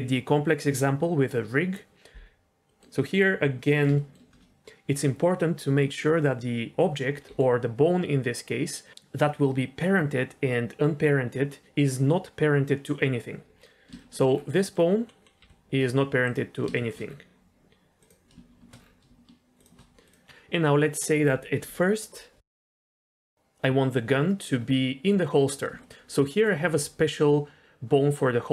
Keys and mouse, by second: 2.6 middle click, 3.9 shift+middle drag, 7.3 g, 13.9 shift+middle drag, 14.6 middle click, 15.3 g, 16.7 shift+middle click, 18.0 click, 19.5 shift+click, 23.3 shift+middle drag, 25.8 shift+middle click, 26.4 click, 26.6 g.